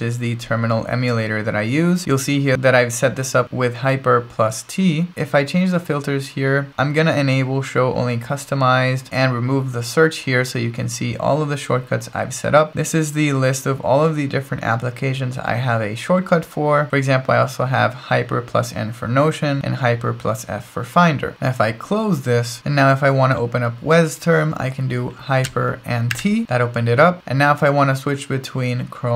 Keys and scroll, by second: 0.0-0.2 typing, 26.1 ctrl+alt+shift+super+t.